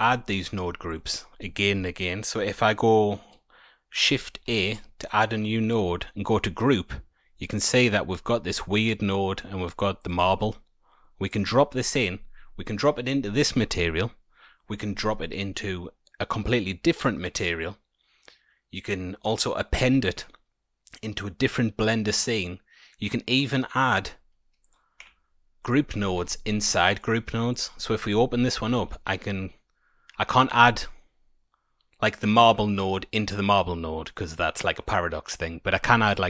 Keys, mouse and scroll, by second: 0.7 scroll up 1, 0.8 click, 4.4 shift+a, 24.6 click, 24.9 Delete, 25.6 click, 26.1 Tab, 26.7 middle click, 27.1-27.5 scroll down 3, 27.5 click, 28.7 shift+a.